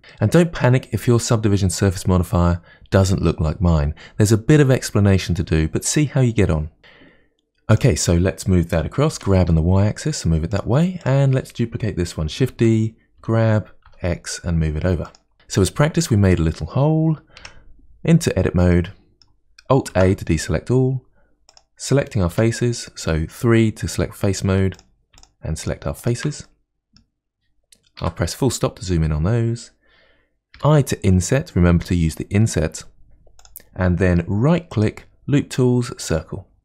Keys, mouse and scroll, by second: 0.1-3.1 middle drag, 7.8 click, 9.2 g, 11.1 click, 12.5 shift+d, 15.3 click, 17.4 Tab, 18.7-19.9 middle drag, 19.9 alt+a, 21.5 click, 22.3 3, 24.8 click, 25.2 shift+click, 25.6 shift+click, 26.0 shift+click, 26.5-28.0 middle drag, 28.0 KP_Decimal, 28.7-30.6 scroll down 1, 34.7-36.6 right drag.